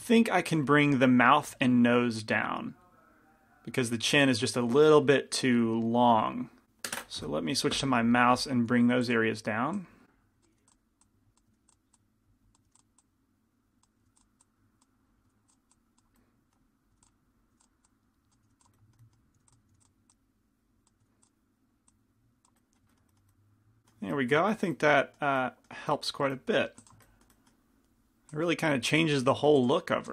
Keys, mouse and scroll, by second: 0.8 f, 1.5 f, 4.9 f, 6.4 f, 8.8 f, 10.1 click, 10.6 f, 10.8-11.8 drag, 11.6 f, 12.1 click, 12.8 f, 13.1 click, 14.1 f, 14.5 click, 15.4 f, 15.8 click, 16.3 middle click, 17.0-19.8 typing, 17.6-18.7 drag, 18.8 middle click, 20.2 click, 21.1 f, 22.0 click, 27.0 f, 28.6-30.1 drag, 29.7 f.